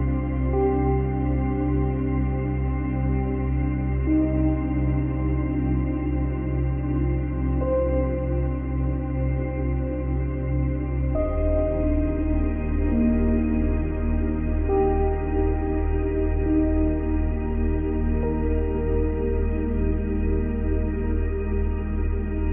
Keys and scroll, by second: 8.6 space, 9.3 space.